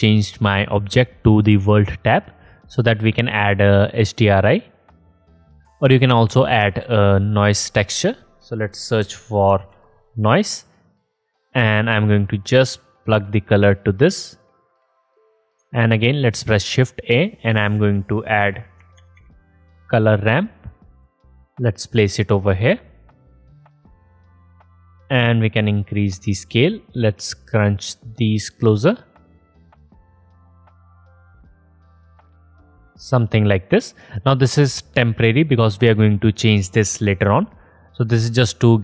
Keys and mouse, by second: 1.6-2.1 drag, 2.1-3.2 middle drag, 3.8-4.4 drag, 7.3-8.0 shift+drag, 7.8 shift+a, 13.8-14.9 drag, 15.4 click, 16.7 shift+a, 25.8 middle click, 27.6-28.7 middle drag, 29.6-30.9 middle drag, 31.5-33.5 middle drag, 34.3-38.7 middle drag.